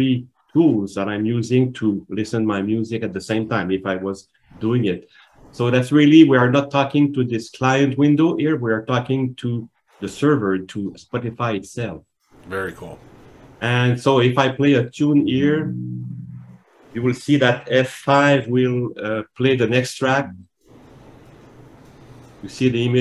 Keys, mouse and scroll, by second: 14.4 click, 20.2 F5.